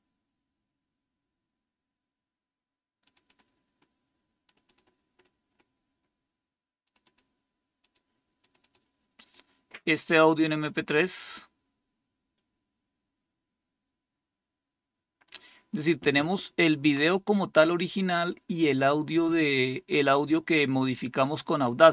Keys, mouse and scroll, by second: 2.9 click, 3.2 click, 4.4 click, 4.5 click, 5.1-5.6 scroll down 2, 6.7 click, 7.0 click, 7.7 click, 8.3 click, 8.5 click, 10.2 click, 19.4 click.